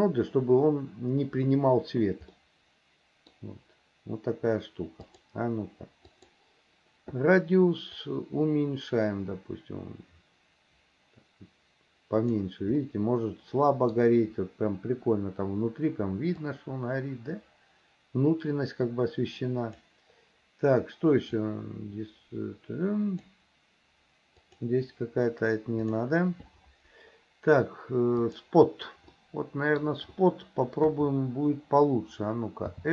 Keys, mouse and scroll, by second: 2.4 middle click, 5.1 click, 8.0-12.3 drag, 12.9-14.0 middle drag, 16.5-19.8 drag, 21.4-23.3 drag, 24.5 click, 25.9 click, 28.3 click, 29.2 middle click.